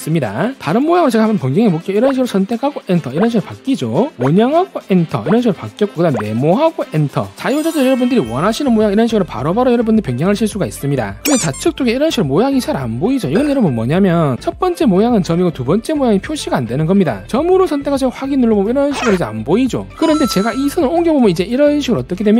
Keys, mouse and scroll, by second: 0.1 right click, 2.3 click, 3.0 click, 4.0 right click, 4.2 click, 4.9 click, 5.8 right click, 6.4 click, 7.0 click, 7.5 click, 8.2 click, 8.7 right click, 9.3 click, 9.9 click, 15.5 click, 16.5 click, 17.7 click, 18.7 click, 19.8 5, 20.0 right click, 20.4 click, 21.0 click, 21.4 click, 21.6 click.